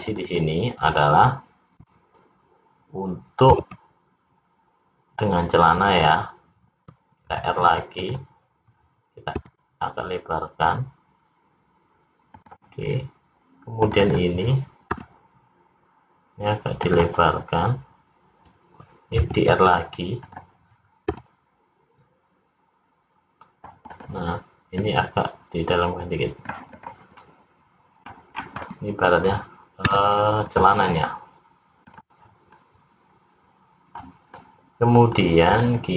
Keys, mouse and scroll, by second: 0.0 click, 0.3 click, 3.6 ctrl+b, 5.9 click, 7.2 ctrl+r, 9.3 s, 12.8-13.2 scroll up 3, 13.9 click, 14.1 click, 14.9 s, 19.2 ctrl+r, 21.2 s, 24.8 click, 26.8 click, 27.3 middle click, 28.4 scroll down 3, 28.7 middle click, 29.9 `, 31.8 click, 32.6 middle click, 34.4 middle click, 35.6-35.9 scroll up 3.